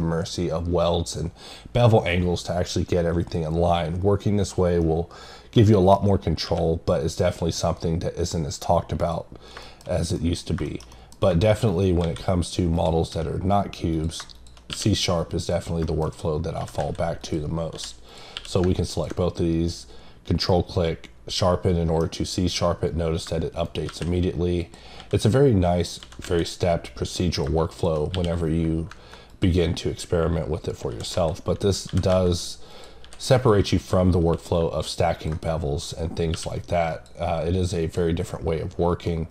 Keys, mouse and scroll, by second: 4.8 middle click, 7.2 click, 9.0 click, 9.4 scroll down 1, 9.6 middle click, 10.2 middle click, 10.9 double middle click, 11.7 right click, 12.7 click, 13.9 click, 15.8 middle click, 16.1-16.6 scroll up 3, 17.2 click, 18.1 click, 20.5 middle click, 23.6 right click, 24.6 click, 25.8 click, 26.0 click, 30.6-31.3 scroll down 2, 31.7 click, 32.7 click, 33.5 click, 34.0-34.6 scroll up 3, 35.1 click, 36.9 click, 37.8 click, 38.2-38.9 scroll down 4, 39.1 middle click.